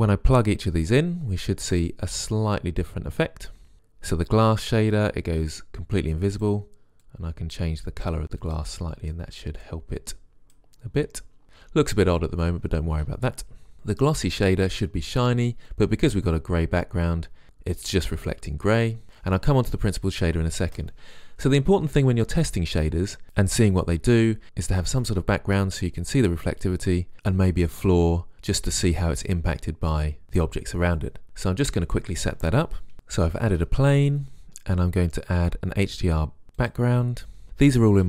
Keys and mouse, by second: 13.8-15.2 drag, 33.4 click, 33.9 shift+a, 34.3 s, 35.1 Delete, 35.4 shift+s, 35.9 shift+a, 36.2 s, 36.7 click.